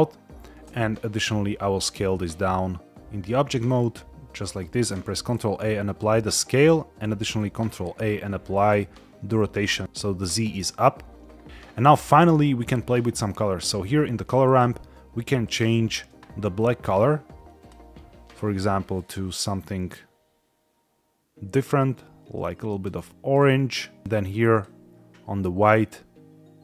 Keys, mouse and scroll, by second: 0.5 s, 4.3 click, 4.6 ctrl+a, 6.9 ctrl+a, 11.9 middle click, 12.6-12.9 scroll up 4, 14.3 click, 15.3 click, 24.4 click.